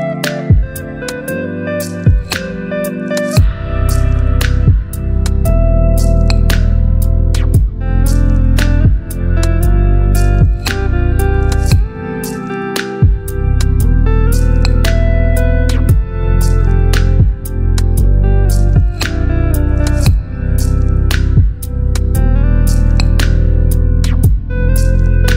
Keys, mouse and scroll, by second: 1.5 shift+i, 3.7 ctrl+a, 5.9 click, 10.8 v, 11.1 ctrl+t, 14.0 ctrl+t, 14.1-17.6 alt+drag.